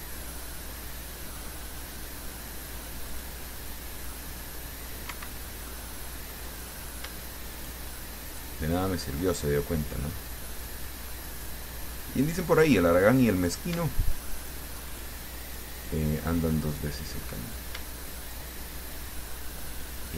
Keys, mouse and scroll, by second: 1.0 middle click, 2.3 middle click, 3.4 click, 5.3 Escape, 5.6-6.7 middle drag, 6.8 middle click, 7.8 shift+right click, 8.5 shift+right click, 9.4 shift+middle click, 10.4 middle click, 11.3-11.7 scroll up 1, 11.9-14.0 drag, 14.6 shift+right click, 15.1 shift+right click, 15.7 shift+right click, 17.4 click, 18.4 shift+right click.